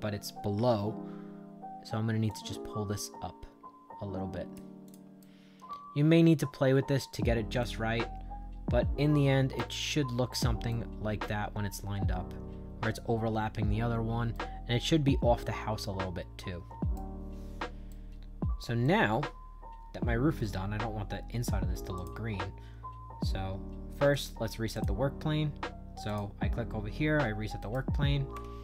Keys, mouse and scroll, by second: 0.4 Left, 2.2-4.4 drag, 4.8 click, 5.1-6.3 right drag, 6.7 middle click, 7.5-9.5 right drag, 9.7 Down, 10.6-12.8 right drag, 13.1 middle click, 14.2-16.9 right drag, 17.8 shift+right click, 18.7-20.4 right drag, 21.9 click, 24.0 click, 24.6 click, 26.0 click, 27.5 right click.